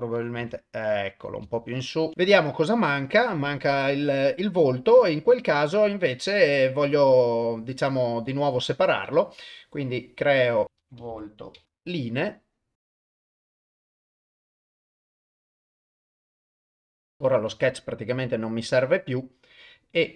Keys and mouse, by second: 0.4 g, 1.7 ctrl+middle drag, 2.8 click, 8.3 click, 10.0 click, 10.6-11.7 drag, 13.0 shift+click, 13.4 shift+click, 13.9 shift+click, 14.8 shift+click, 15.1 shift+click, 15.5 click, 15.7 click, 16.0 ctrl+z, 16.1 shift+click, 16.9 ctrl+shift+middle click, 17.6 shift+middle click.